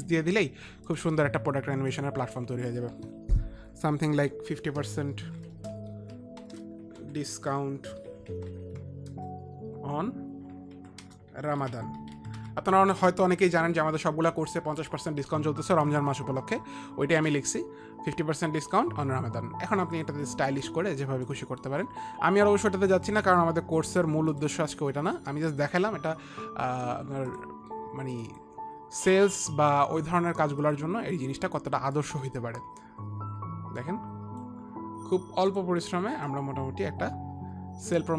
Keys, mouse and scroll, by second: 0.9 shift+Left, 0.9 click, 2.4 click, 3.6 click, 4.9 click, 4.9-8.5 typing, 10.8-13.2 typing, 16.7 ctrl+a, 17.2 ctrl+a, 21.3 click, 23.2 click, 26.1 click, 27.8 click, 28.7 click, 28.9 click, 31.2 shift+click, 32.5 shift+click, 35.4 click, 36.0 click, 36.8 click.